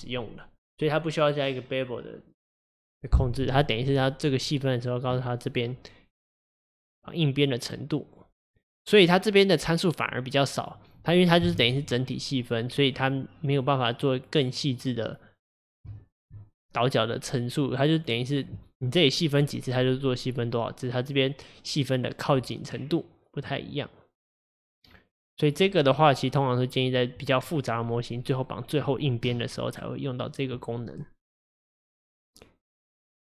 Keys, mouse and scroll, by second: 5.2-6.5 middle drag, 6.5-9.6 drag, 11.5 KP_1, 15.5-16.0 scroll up 2, 16.0-19.0 shift+middle drag, 23.0-26.0 drag, 32.7-33.2 drag.